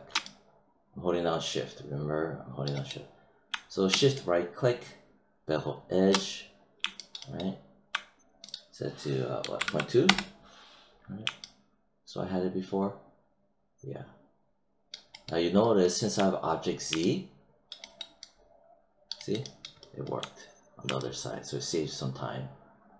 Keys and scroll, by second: 9.3 ., 10.0 Return.